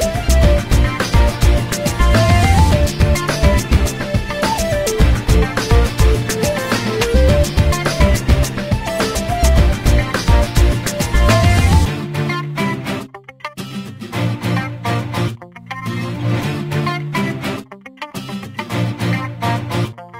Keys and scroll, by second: 0.3 space, 10.1 m, 15.3 8, 16.3 Return.